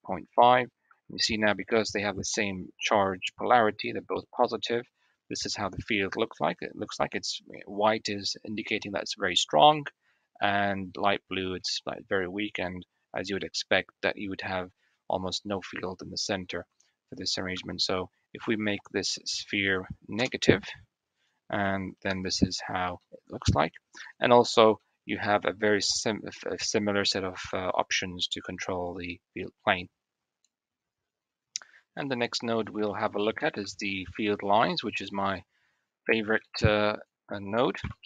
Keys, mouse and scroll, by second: 0.2 click, 1.9 Tab, 2.5 middle click, 4.7 drag, 8.8 click, 8.9-9.3 right drag, 9.3 click, 10.6 click, 11.5-11.9 drag, 11.9 middle click, 17.6 Tab, 19.6-21.2 drag, 21.4 click, 23.0 Tab, 23.0-23.7 middle drag, 24.6-24.9 middle drag, 31.8 middle click, 31.9-32.2 drag, 31.9-32.2 right drag, 32.3 click, 32.5 a, 32.6 x, 33.6 shift+middle click, 36.7 click, 37.5 KP_1.